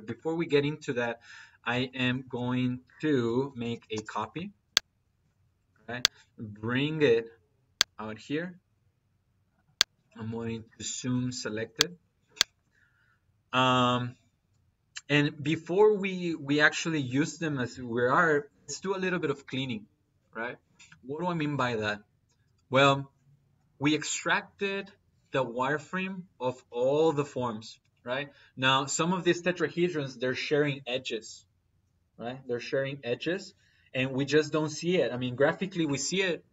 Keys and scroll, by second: 2.6 Escape, 3.1 c, 3.6 p, 3.7 y, 3.8 space, 5.5 space, 7.8 Escape.